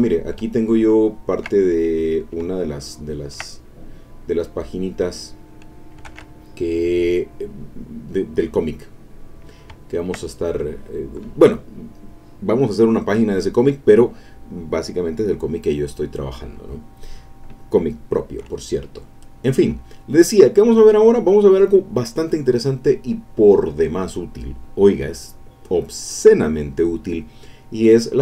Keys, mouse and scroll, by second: 0.5-1.6 ctrl+drag, 1.6 ctrl+middle click, 1.9 click, 2.8-6.2 ctrl+drag, 6.1 ctrl+Tab, 8.4-9.6 drag, 9.8 ctrl+click, 10.5 ctrl+middle click.